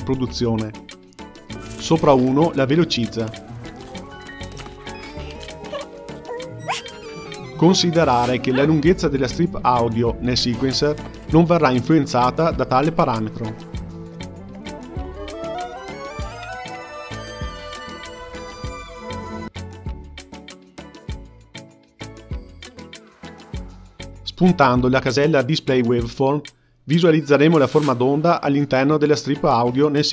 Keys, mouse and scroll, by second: 1.5 space, 3.0-12.7 drag, 7.9 Left, 8.1 Left, 14.3-19.3 drag, 19.3 space, 19.9-22.2 drag, 24.7-29.3 middle drag, 29.8-30.1 middle drag.